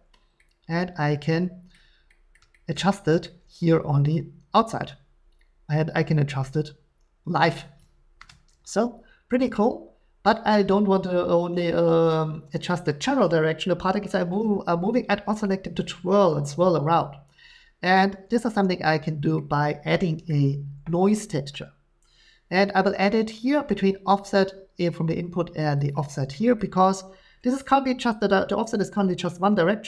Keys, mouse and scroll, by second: 1.7 scroll, 2.3-3.3 scroll, 7.8 shift+click, 20.3-24.8 shift+middle drag, 25.9 click, 26.6 scroll.